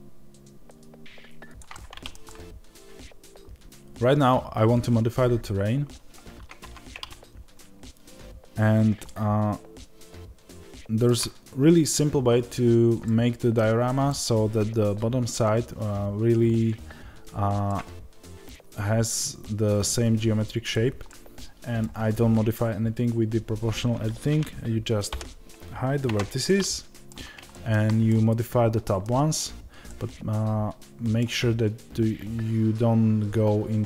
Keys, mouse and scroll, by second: 1.5 click, 2.1-3.3 middle drag, 2.1 scroll down 2, 3.3 Tab, 8.9-33.8 middle drag, 12.1-12.9 scroll up 1, 25.0 h.